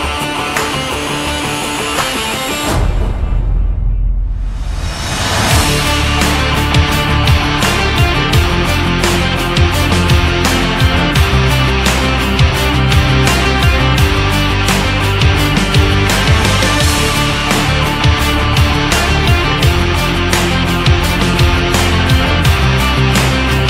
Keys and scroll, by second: 16.6 ctrl+z.